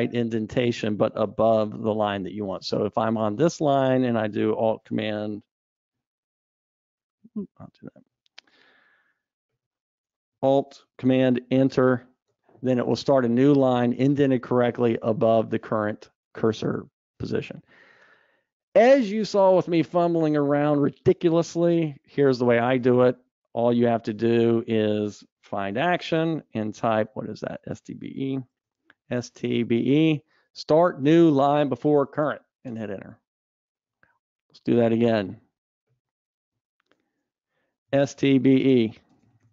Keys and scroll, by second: 2.2 super+z, 4.1 super+z, 6.7 ctrl+shift+super+z, 7.8 super+z, 12.2 alt+super+Return, 18.8 super+z, 27.0 ctrl+shift+super+a, 33.0 alt+super+Return, 34.3 super+z, 37.7 ctrl+shift+super+a.